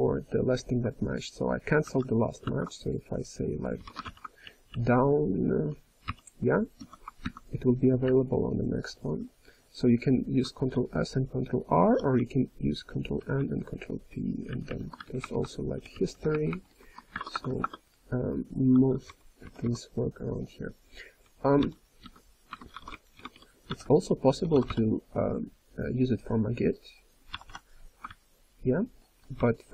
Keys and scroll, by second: 1.8 ctrl+g, 2.7 ctrl+s, 4.4-5.5 ctrl+n, 6.0 Return, 7.1 ctrl+s, 7.2 ctrl+s, 8.0 ctrl+n, 8.5 ctrl+n, 8.9 ctrl+n, 9.1 ctrl+s, 10.7 ctrl+r, 12.1-13.3 ctrl+n, 13.3 ctrl+p, 13.8 ctrl+p, 13.9 ctrl+p, 14.4 ctrl+n, 14.6 ctrl+n, 15.0 alt+p, 15.7 alt+n, 16.3 alt+p, 17.1 alt+BackSpace, 17.3 alt+BackSpace, 18.8-19.9 typing, 21.6 η, 23.1 BackSpace, 23.6 Return, 24.4 µ, 24.7 m, 27.3 b, 27.4 b, 28.1-28.8 ctrl+n, 28.7-29.7 typing.